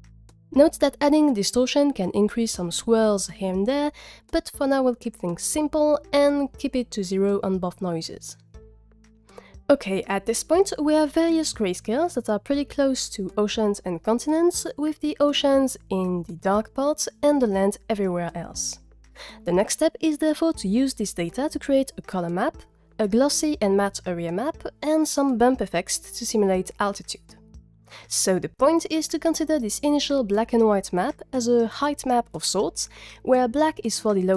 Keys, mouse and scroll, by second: 1.2 click.